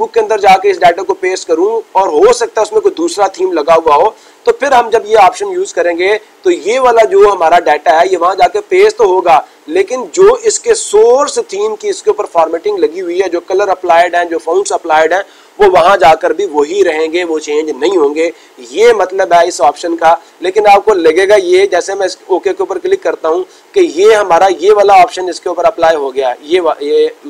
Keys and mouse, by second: 21.7-22.7 drag, 25.7-26.7 drag.